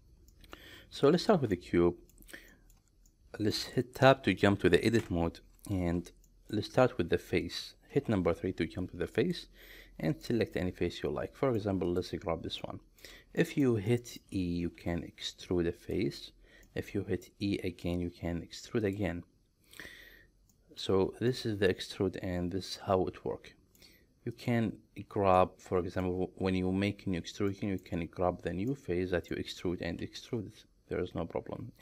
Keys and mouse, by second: 0.4 middle click, 1.6-2.2 middle drag, 2.5 shift+middle click, 3.2 middle click, 5.0 Tab, 6.3 shift+middle click, 8.0 3, 10.3-11.6 middle drag, 12.6 middle click, 13.4 shift+middle click, 13.9 middle click, 14.8 e, 15.8 click, 16.8 middle click, 17.7 e, 18.9 click, 20.6 shift+middle click, 21.3-23.8 middle drag, 24.4 click, 25.4 middle click, 27.5 middle click, 28.9 middle click, 30.0 e.